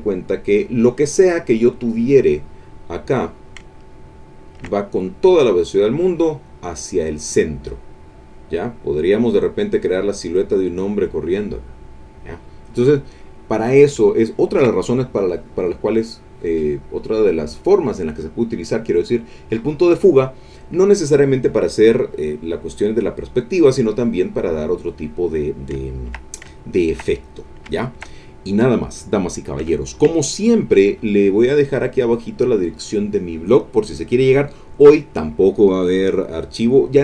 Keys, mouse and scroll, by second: 2.0 click, 3.0 click, 3.9-8.5 ctrl+middle drag, 3.9-4.8 ctrl+scroll down 2, 4.8-5.1 ctrl+scroll up 2, 14.3 ctrl+click, 21.2 click, 21.7 middle click, 21.8 click, 23.0 click, 23.6 click, 25.8 ctrl+click, 26.3-27.6 ctrl+drag, 27.8 ctrl+click, 29.9 ctrl+click, 30.4 ctrl+click.